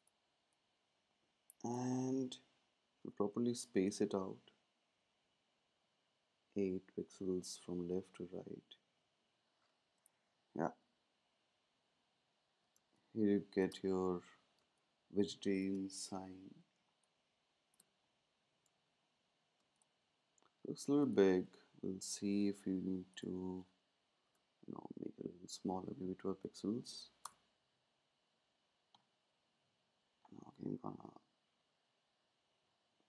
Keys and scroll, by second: 3.7 Down, 5.8 Down, 7.2-7.5 typing, 8.7 typing, 24.2 Tab, 25.1 Down, 25.2 Down, 31.0 Up, 31.1 Up, 31.5 Left.